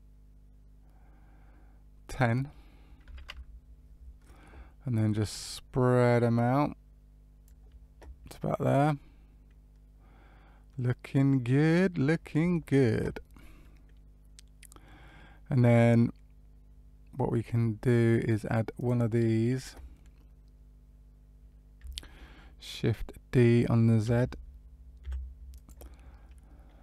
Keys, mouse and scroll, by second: 2.0 click, 4.9 click, 8.3 middle click, 13.5 middle click, 15.8 middle click, 18.7 click, 24.0 shift+d.